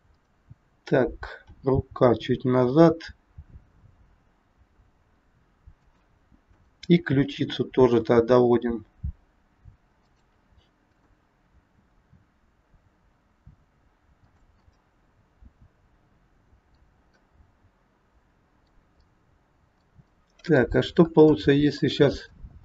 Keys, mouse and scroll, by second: 0.0 click, 1.4 r, 6.4 click, 7.2 r, 10.8 click, 11.6 r, 14.6 middle click, 17.2 middle click, 20.1 middle click, 20.1 scroll up 1, 20.9 scroll up 2, 21.3 shift+middle click, 21.4 shift+middle click, 22.3-22.6 scroll down 2.